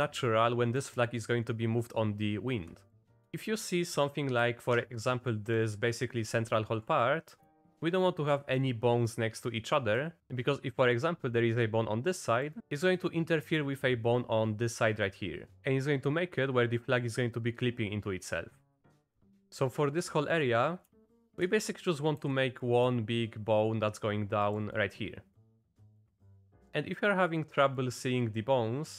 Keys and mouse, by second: 0.8 middle click, 2.9 middle click, 4.0 middle click, 5.7 middle click, 7.1 click, 7.7 shift+click, 8.4 click, 9.2 click, 9.9 click, 12.4-13.5 drag, 18.6 click, 19.0 click, 21.2 shift+click, 22.2 e, 24.8 click, 25.7 shift+click, 26.4 click, 27.8 click.